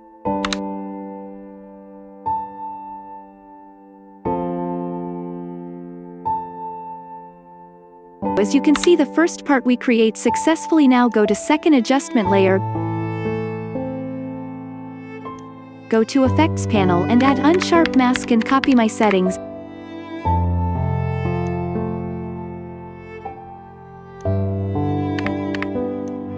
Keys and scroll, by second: 8.8 space, 17.3-18.9 typing, 25.2 KP_2, 25.5 KP_5.